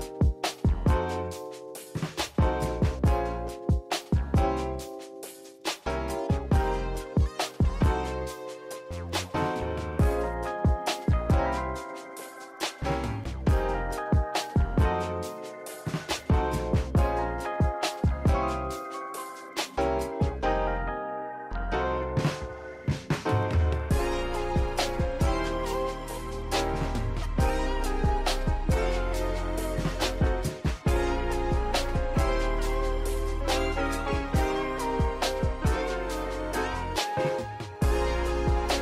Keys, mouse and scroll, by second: 0.2 g, 1.0 Tab, 1.5 click, 1.7 g, 3.1-4.2 drag, 4.2 g, 4.7 scroll down 1, 4.9 shift+middle click, 5.9 click, 6.3 click, 7.1 g, 8.5 click, 8.7 s, 10.3 click, 10.7 scroll up 1, 10.8 Tab, 11.1-11.4 shift+middle drag, 11.4 ctrl+r, 14.9 p, 15.2 Tab, 15.4 click, 15.7 shift+click, 16.1 click, 16.4 click, 16.8 click, 17.3 shift+click, 17.7 Tab, 18.0 a, 18.2 e, 19.5 a, 19.7 g, 20.4 e, 21.5 Tab, 21.7-22.1 scroll up 1, 22.1 s, 24.1 click, 24.9 click, 25.3-26.6 drag, 26.6 ctrl+2, 27.1 ctrl+z, 27.3 click, 27.6 click, 28.1 shift+drag, 28.4 g, 30.6 click, 30.8-31.1 scroll down 3, 31.1 shift+middle click, 31.6-33.1 scroll down 1, 35.8-36.4 scroll down 1, 36.4 shift+middle drag, 36.6 scroll up 2.